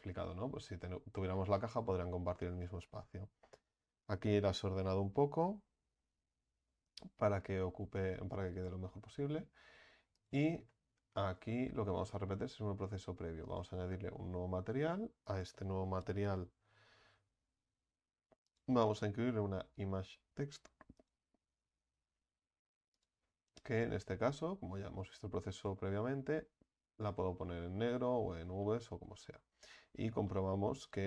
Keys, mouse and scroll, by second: 0.1 Tab, 1.2 Tab, 7.7 Tab, 13.6-21.5 drag, 23.7 click, 24.4 click, 28.2-28.5 scroll down 2, 28.5 scroll up 1, 28.6-29.5 middle drag, 29.5 scroll up 3, 30.3-31.0 middle drag.